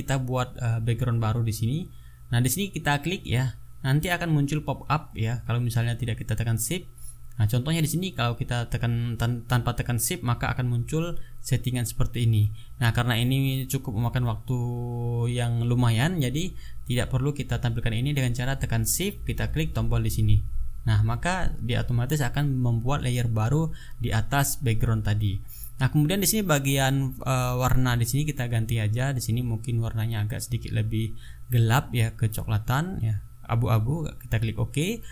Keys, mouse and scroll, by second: 0.2 click, 4.2 shift+click, 7.2 ctrl+z, 10.1 click, 12.1 click, 17.5 click, 19.9 shift+click, 27.5 click, 28.9-32.2 drag, 34.5 click.